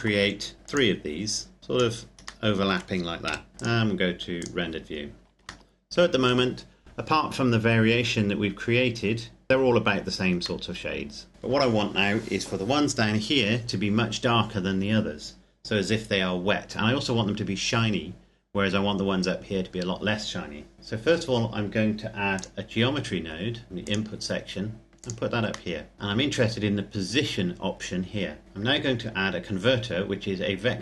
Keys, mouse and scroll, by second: 0.5 click, 2.2 middle click, 3.1 KP_0, 3.5 click, 5.4 shift+middle click, 8.3-9.1 scroll up 1, 9.5 scroll down 1, 10.4 middle click, 17.7-19.5 scroll up 1, 22.1 click, 25.5 middle click, 25.9 click, 26.6-28.4 scroll up 1, 28.9 click.